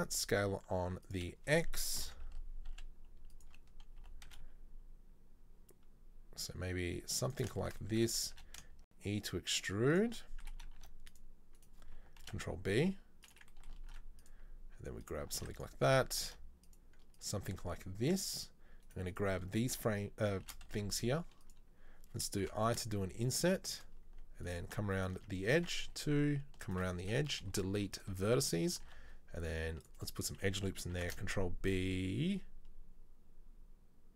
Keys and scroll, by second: 2.1 ctrl+l, 2.8 s, 4.2 g, 8.5 e, 10.7 ctrl+r, 12.3 ctrl+b, 13.9 ctrl+r, 15.4 ctrl+r, 16.3 ctrl+r, 20.5 shift+d, 22.5 i, 25.8 2, 27.4 \, 27.5 Delete, 29.0 ctrl+r, 31.0 ctrl+b.